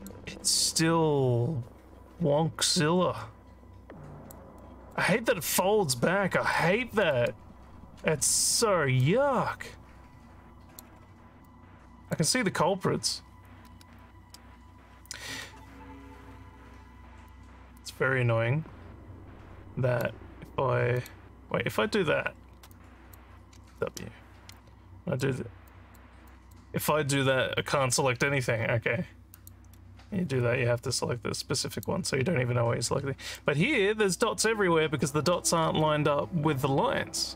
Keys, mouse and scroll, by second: 0.7-4.3 alt+drag, 4.6 alt+middle click, 7.0 click, 8.2 click, 9.0-10.8 alt+drag, 11.5 alt+click, 17.3-20.0 drag, 20.9 click, 22.7 click, 23.9 w, 24.5 click, 25.7 click, 26.3 click, 29.3 click, 31.7 click, 33.4 click.